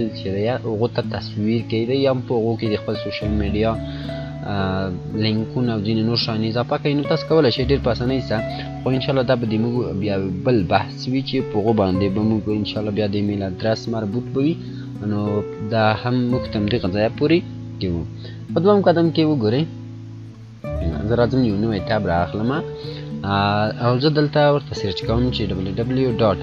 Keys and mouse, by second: 1.1 click, 7.8 click, 17.6 click, 20.9 click, 25.0 click, 25.1-26.3 typing.